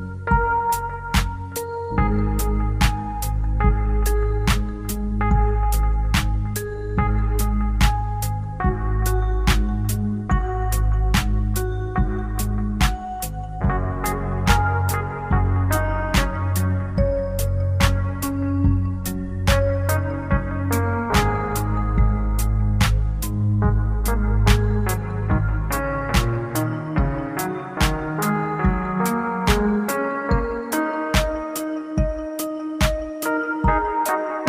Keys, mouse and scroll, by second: 0.1 middle click, 10.6 click, 22.7 click, 30.6 click, 31.0 click.